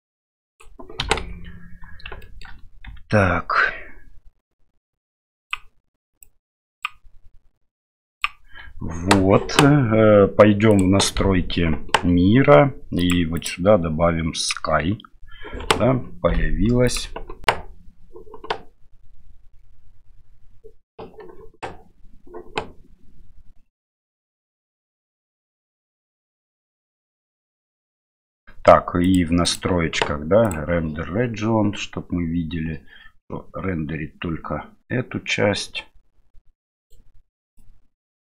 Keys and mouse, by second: 1.0 KP_7, 2.3 shift+middle click, 2.8 s, 6.2 click, 7.7 click, 10.7 click, 13.0 click, 13.4-14.5 drag, 16.9 click, 29.0 click, 29.4 click, 30.4 click, 36.8 right click, 37.5-38.3 drag.